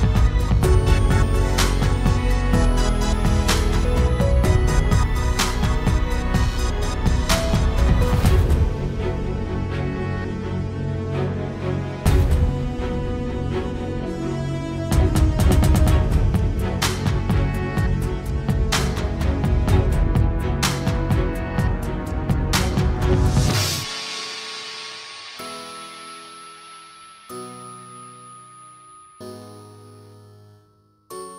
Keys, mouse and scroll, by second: 10.4-16.0 drag.